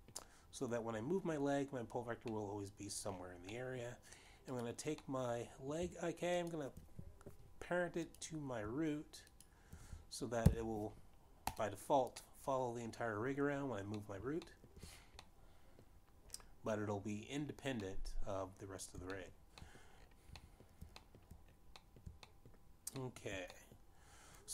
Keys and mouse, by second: 1.4 middle click, 4.0 middle click, 6.2 click, 6.5 middle click, 7.9 shift+click, 9.5 click, 12.1 ctrl+p, 12.1 shift+click, 12.4 click, 13.9 middle click, 15.7 middle click, 16.2 shift+middle click, 16.9 middle click, 19.5 middle click, 20.9 shift+middle click, 21.2 shift+middle click, 22.0 shift+middle click, 22.6 shift+middle click, 23.4 middle click, 24.0 shift+middle click.